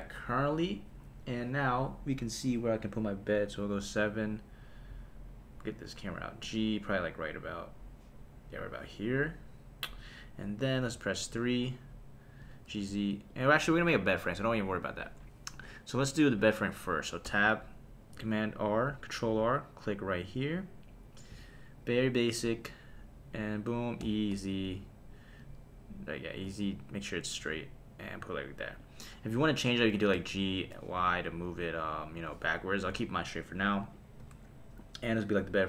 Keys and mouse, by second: 2.8 click, 3.7 KP_7, 6.4 g, 8.6 click, 10.9 KP_3, 12.4 g, 12.7 z, 13.3 click, 17.2 Tab, 18.2 super+r, 21.4 click, 22.6 click, 23.4 click, 24.0 e, 24.3 z, 25.4 z, 26.4 z, 28.8 click, 30.1 g, 31.0 y, 32.9 Escape, 34.2 Tab.